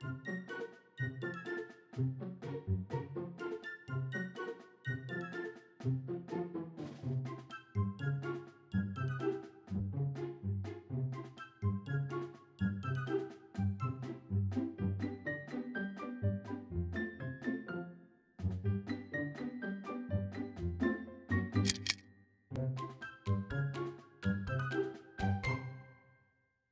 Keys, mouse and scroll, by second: 2.3 click, 3.9 click, 5.2 click, 7.1 click, 8.6 a, 10.3 click, 11.7 click, 13.2 click, 14.5 click, 16.1 click, 17.5 click, 18.8 click, 20.2 click, 21.4 click, 22.1 middle click, 23.0-23.4 scroll down 1.